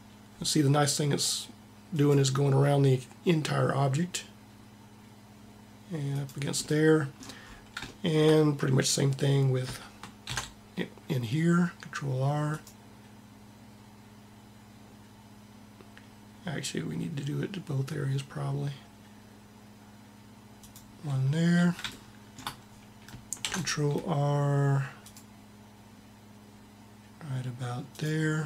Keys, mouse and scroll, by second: 1.7 ctrl+r, 6.5-7.8 middle drag, 10.0 ctrl+r, 12.4 ctrl+r, 23.3 ctrl+r.